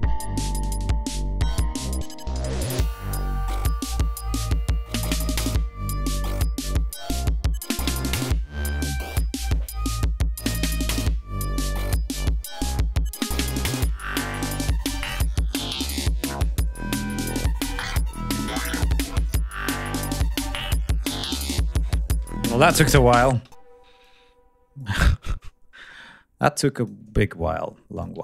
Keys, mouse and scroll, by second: 23.4 space, 24.1-25.0 drag, 26.4 click, 28.0 ctrl+click.